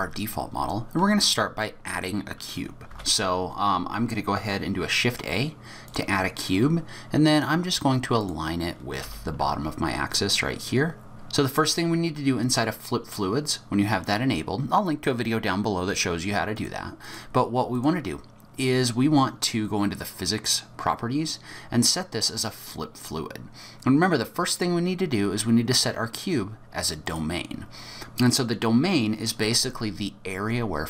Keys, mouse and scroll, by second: 2.9 shift+a, 8.2 click, 9.0 g, 11.1 shift+middle click, 11.1 n, 11.4 click, 12.6 middle click, 12.6-13.0 scroll up 5, 16.5 click, 17.0 click, 17.8 click, 22.6 click, 24.5 click, 28.2 middle click.